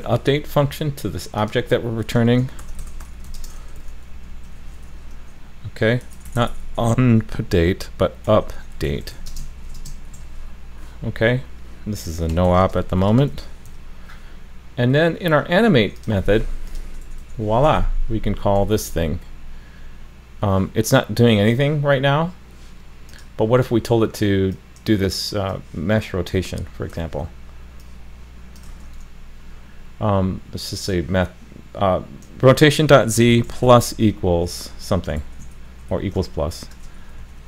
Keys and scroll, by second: 18.7 super+s, 26.9 super+c, 28.7 super+v.